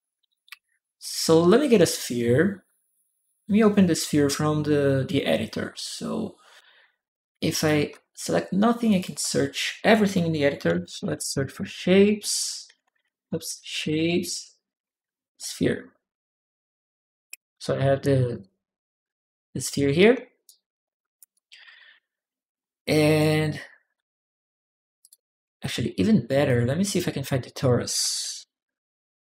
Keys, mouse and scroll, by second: 0.8 click, 7.3 ctrl+click, 8.7 ctrl+click, 10.3-15.3 typing, 12.6 Return, 16.1 middle click, 18.1 click, 18.2 click, 20.2 click, 21.0-22.8 typing, 21.1-22.4 right drag, 24.8 click, 26.2 click, 26.6 click, 26.7 click, 27.7-28.7 typing.